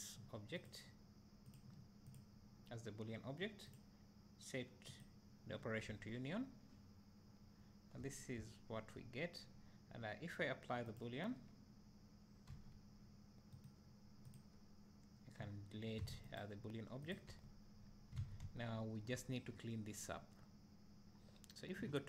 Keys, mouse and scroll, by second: 5.1-7.5 drag, 5.9 `, 8.4-11.4 drag, 12.6 g, 14.0 right click, 14.8 click, 17.2 click, 17.7 Tab, 17.8 scroll up 1, 19.8 scroll down 2.